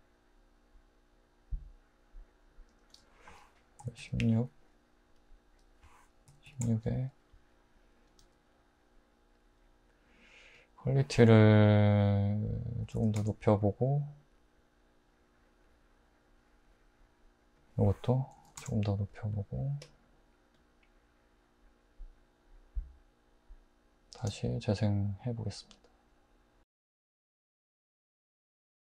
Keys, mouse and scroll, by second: 3.8 typing, 6.3-6.6 typing, 12.9 typing, 13.2 Return, 18.3 typing, 18.6 Return, 20.7 typing, 24.2 space.